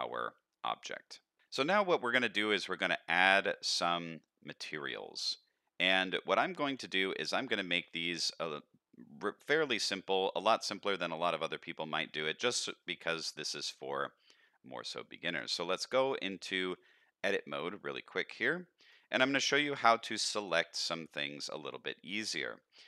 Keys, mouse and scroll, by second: 1.7-2.1 middle drag, 2.4-2.9 middle drag, 3.1-3.5 middle drag, 3.7 middle click, 4.4 middle click, 5.2-5.6 middle drag, 5.9 z, 7.0 shift+middle drag, 7.4-7.7 middle drag, 7.9 shift+middle drag, 9.4-9.8 middle drag, 10.1-10.6 middle drag, 12.1-12.8 middle drag, 13.0 shift+middle click, 13.4-13.8 middle drag, 14.0 shift+middle click, 14.4 middle click, 15.4 Tab, 16.6 middle click, 17.5 shift+middle click, 17.9 middle click, 18.8 click, 19.2 shift+middle click, 19.6 middle click, 21.4 click.